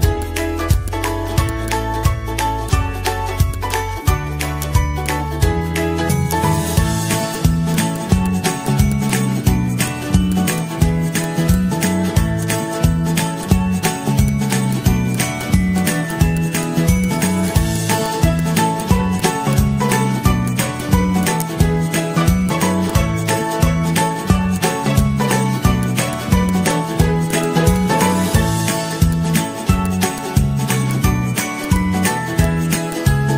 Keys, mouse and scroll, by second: 2.2 g, 11.1-11.9 z, 12.1 h, 13.0 ctrl+-, 13.6 g, 14.6-14.9 Caps_Lock, 23.8 ctrl+z, 24.0 ctrl+-, 24.0 ctrl+-, 25.3 g, 28.0 g, 28.2 g, 28.3 g, 30.6 g.